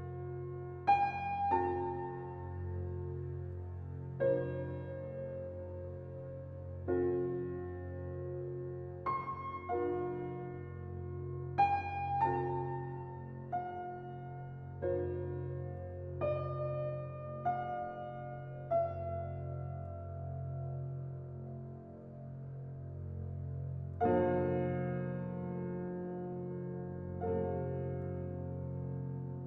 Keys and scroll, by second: 6.5 typing.